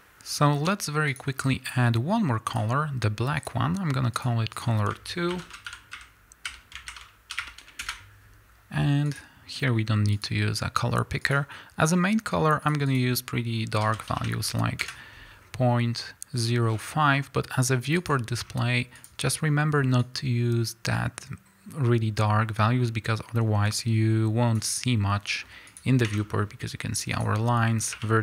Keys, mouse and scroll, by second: 4.6-12.4 drag, 8.0 Return, 20.0 click, 25.8 click, 26.1 Tab, 26.2 scroll up 1, 27.2 click, 27.9 1.